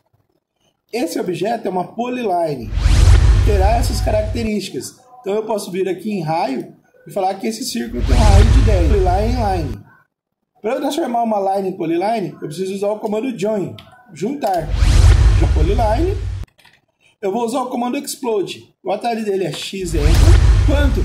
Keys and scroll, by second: 7.8 0, 13.7 j, 14.5 space, 16.4 Escape, 19.5 x, 20.0 Return.